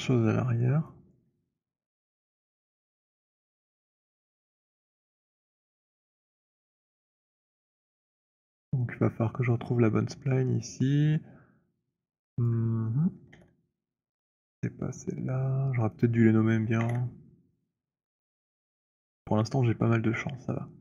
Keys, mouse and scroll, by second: 0.1 alt+right click, 0.8 alt+middle click, 1.2 alt+click, 3.6 click, 6.0 ctrl+h, 12.5 click, 13.4 h, 14.5 z, 15.7 click, 16.8 h.